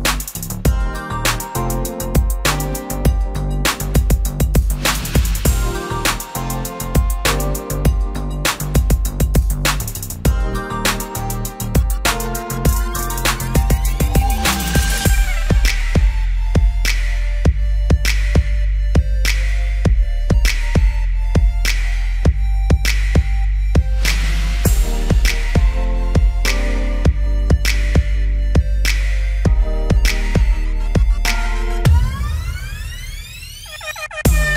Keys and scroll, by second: 5.6 ctrl+0, 8.1 v, 21.2 ctrl+t.